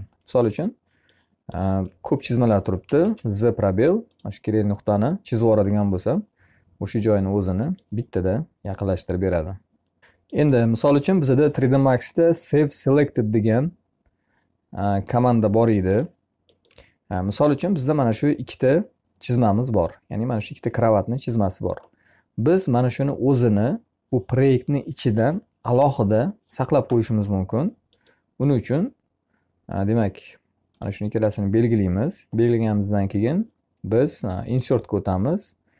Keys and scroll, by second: 2.2 z.